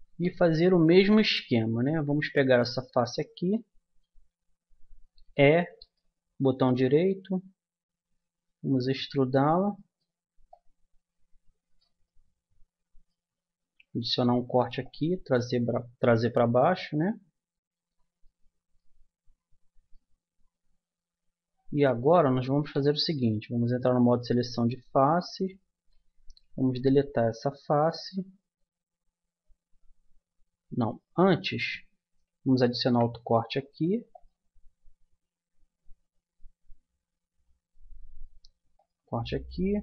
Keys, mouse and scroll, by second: 5.2 e, 6.6-8.3 drag, 9.0-10.5 middle drag, 10.5-13.1 drag, 14.4 ctrl+r, 19.6 middle click, 20.0 middle click, 20.3 middle click, 20.8 middle click, 23.6-25.2 middle drag, 26.2-28.1 right drag, 28.2 Delete, 31.3 a, 32.8 ctrl+r.